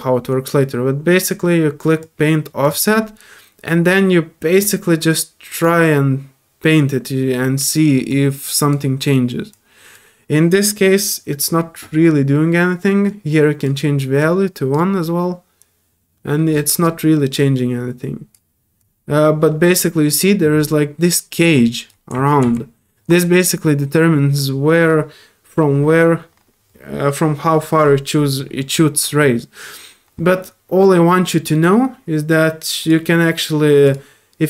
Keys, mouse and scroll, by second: 2.0-2.6 drag, 4.6-5.6 drag, 8.1 click, 9.5 click, 13.0 click, 14.2 click, 17.3 click, 18.8-21.9 drag, 32.8 click, 33.8 click.